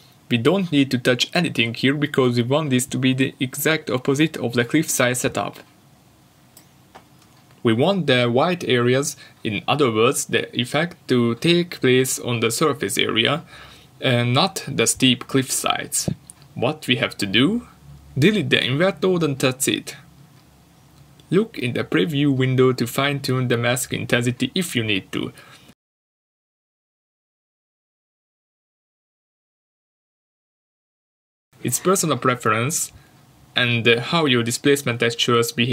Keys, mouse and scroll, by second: 4.5 ctrl+shift+click, 10.6 click, 11.6 alt+click, 12.4 click, 13.7 Delete, 16.5 middle click, 17.0 middle click, 17.2 scroll down 1, 18.0 middle click, 19.0-19.4 scroll down 1, 19.4 shift+middle click, 19.8 scroll up 1, 20.4 middle click, 20.9 scroll down 1, 21.2 middle click, 23.1 shift+middle click, 24.0 middle click, 24.6 shift+middle click, 25.0 scroll up 1, 25.9 middle click, 26.6 scroll down 1, 27.0 middle click, 27.6 shift+middle click, 28.7 ctrl+shift+click, 29.6 middle click, 30.2 scroll up 1, 31.0 middle click, 31.8 ctrl+shift+click, 33.0 middle click, 34.1 ctrl+shift+click.